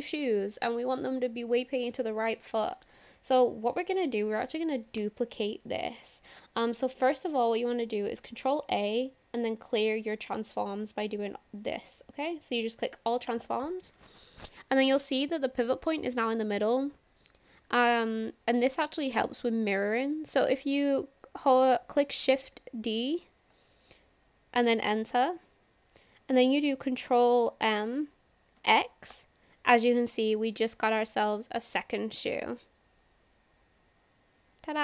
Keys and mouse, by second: 8.5 ctrl+a, 22.6 shift+d, 23.5 Return, 27.1 ctrl+m, 28.6 x, 29.1 Return, 30.2-31.0 shift+middle drag, 32.8-34.8 middle drag.